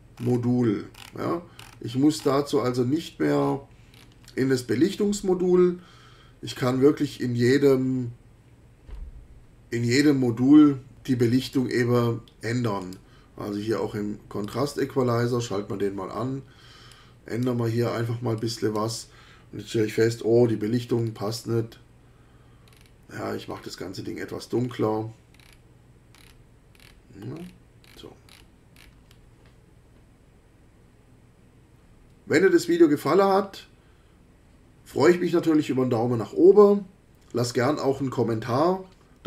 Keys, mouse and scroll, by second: 0.2-0.6 scroll up 3, 0.9-1.3 scroll up 2, 1.6-1.9 scroll up 2, 2.2-2.5 scroll up 2, 3.4-4.2 scroll down 4, 6.5 click, 11.4 click, 12.8 click, 14.4 click, 16.9 click, 18.4 click, 20.7 e, 20.9-21.6 scroll down 1, 22.6-23.0 scroll down 2, 23.4-23.9 scroll down 1, 24.6-25.0 scroll down 1, 25.4-25.7 scroll down 2, 26.1-27.1 scroll down 3, 27.3-28.6 scroll down 6, 28.8 scroll down 1.